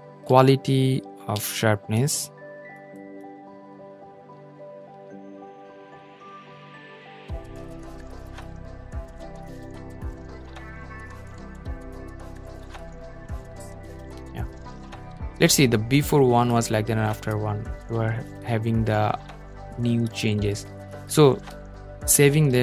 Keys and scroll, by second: 0.1 super+z, 5.6 super+z, 11.3 super+0, 21.4 super+g.